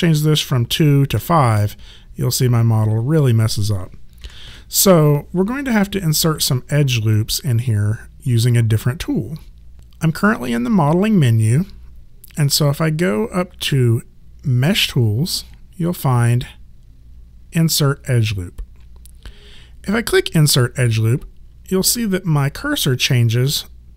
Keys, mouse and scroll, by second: 1.1 KP_5, 1.6 KP_Enter, 4.2 KP_2, 4.5 KP_Enter, 14.6 click, 20.0 click, 21.6 alt+click.